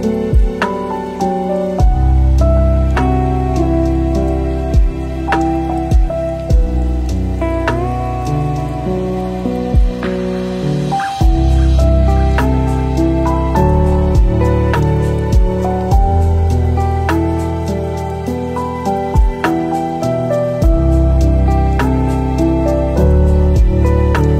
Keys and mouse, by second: 0.5 click, 1.0 shift+drag, 1.0 shift+middle click, 2.2 g, 4.2 r, 6.0 g, 7.5 r, 10.1 click, 10.3 drag, 10.4-11.7 middle drag, 12.1-14.1 middle drag, 14.2-15.1 drag, 15.7-17.1 middle drag, 17.5 g, 19.8-21.4 middle drag, 21.4-22.2 drag, 23.6 Tab.